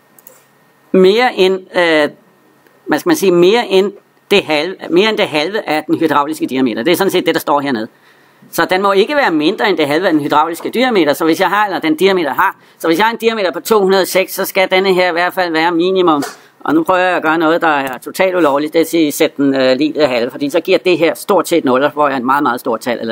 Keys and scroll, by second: 17.7 Return.